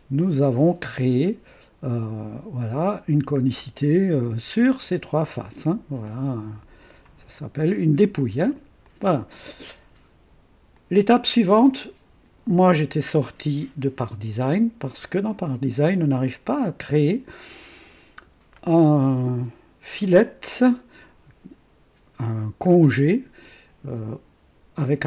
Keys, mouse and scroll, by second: 0.8 KP_5, 6.0-7.1 drag, 7.3 KP_3, 8.8 click, 10.7 click, 19.2 click.